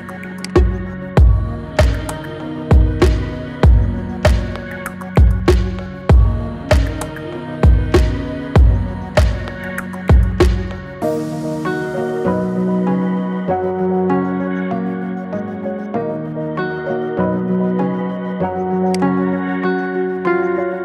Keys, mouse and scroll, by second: 0.4-12.1 drag, 12.1-12.7 scroll up 6, 18.8-20.8 drag.